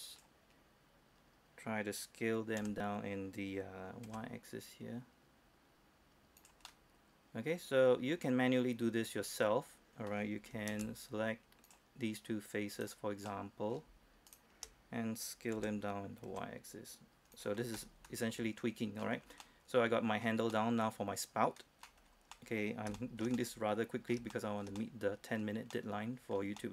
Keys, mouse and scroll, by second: 2.8 s, 4.4 y, 6.7 click, 7.0-10.9 middle drag, 12.0 ctrl+Tab, 12.0 click, 13.0 right click, 13.6 middle click, 14.6 shift+right click, 15.9 shift+s, 16.6 shift+y, 17.6 click, 17.9 scroll down 1, 18.1 middle click, 19.5 scroll down 1, 19.7-22.3 middle drag, 22.3-22.6 scroll up 1, 22.6 middle click, 23.3 shift+middle click, 24.6 shift+middle click, 25.8 scroll down 1, 26.0-26.7 middle drag.